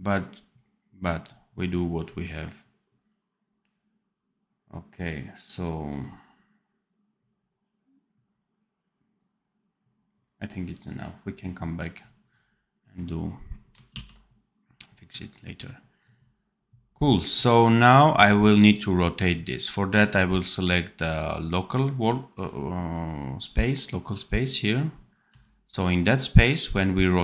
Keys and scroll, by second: 13.9 ctrl+s, 25.2 c.